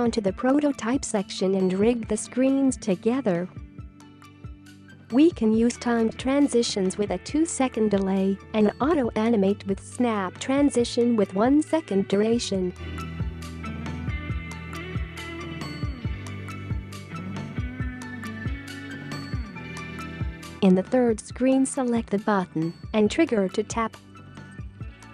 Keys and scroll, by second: 8.5 2, 14.8 1.